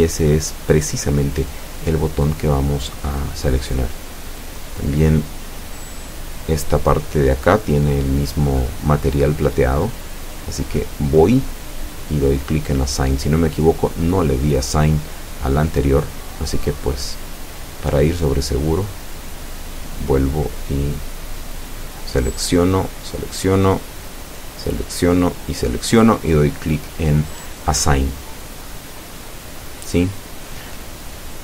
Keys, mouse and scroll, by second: 1.2-1.6 scroll down 1, 1.8 middle click, 2.5 scroll up 2, 2.9-8.4 middle drag, 9.4 right click, 11.8 alt+shift+right click, 13.2 alt+shift+right click, 23.2 click, 24.2 middle click, 25.3-26.3 middle drag, 26.9 scroll down 1, 29.2 right click, 30.3 a, 30.9 alt+shift+right click.